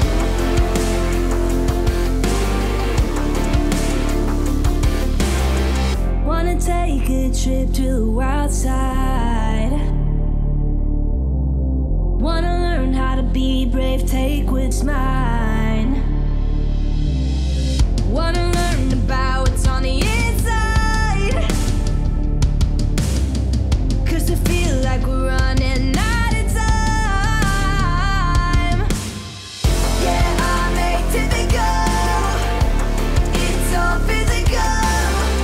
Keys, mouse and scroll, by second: 3.1-3.8 middle drag, 5.2-6.7 drag, 6.9-7.5 middle click, 8.0-8.9 drag, 9.9-10.9 alt+drag, 13.7-15.3 drag, 16.6-17.2 middle click, 17.7 click, 18.2-18.9 middle drag, 19.8-21.7 drag, 22.3-23.5 alt+drag, 25.6-26.5 alt+click, 26.6-27.5 scroll down 1, 27.5 click, 30.7 click, 33.6 ctrl+d, 34.6 click.